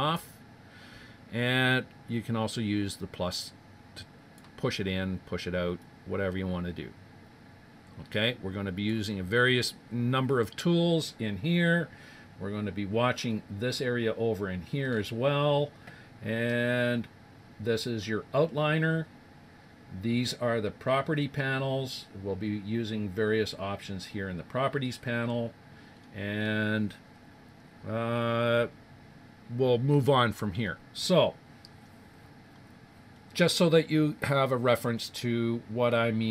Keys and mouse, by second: 0.0-0.9 typing, 2.7 click, 2.9 click, 3.5 click, 4.2 click, 5.8 click, 6.4 click, 7.1 click, 13.1-17.0 middle drag, 25.9-28.4 middle drag, 31.0-34.9 middle drag.